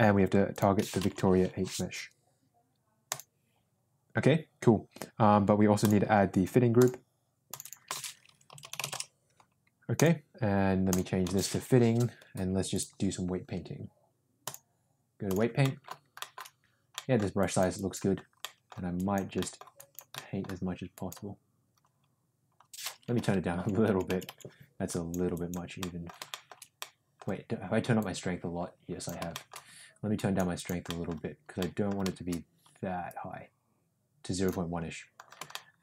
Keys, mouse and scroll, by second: 0.5-3.3 drag, 6.7 drag, 7.5-9.3 drag, 8.5 t, 9.9 click, 10.8-12.8 drag, 14.5 click, 15.6 middle click, 16.1 shift+middle click, 16.9 middle click, 17.3 click, 17.7 click, 18.4 middle click, 18.9 click, 19.3 middle click, 19.7 click, 20.1 middle click, 20.9 click, 23.1 [, 23.8 [, 24.0 [, 24.2 [, 24.8 click, 25.3 click, 25.7 middle click, 26.2 shift+middle click, 26.7 middle click, 27.9-29.0 drag, 29.3 shift+middle click, 30.1 click, 30.5 click, 30.8 middle click, 31.5 middle click, 33.0-34.4 drag, 35.5 shift+middle click.